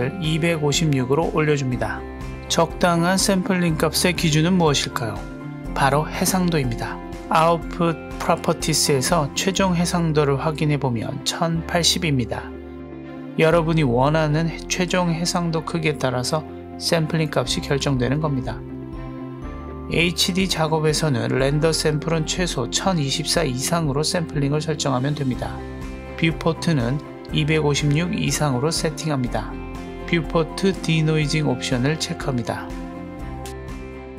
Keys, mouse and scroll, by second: 1.7-2.1 scroll down 1, 9.6 click, 10.6 click, 16.2 click, 19.4 click, 21.0-25.1 drag, 27.0-29.3 drag, 31.3 click, 32.0 click.